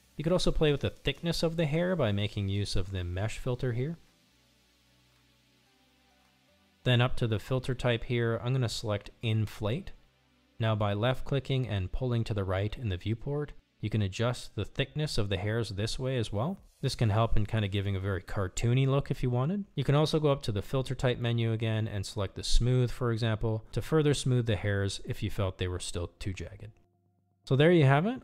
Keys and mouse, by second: 0.2 click, 0.8 click, 1.9 shift+middle click, 5.4 click, 9.4-12.3 drag, 12.9-17.0 drag, 18.1-19.0 middle drag, 19.5 ctrl+z, 21.1 middle click, 23.6-24.4 drag, 24.8-25.3 drag, 25.6-26.0 drag.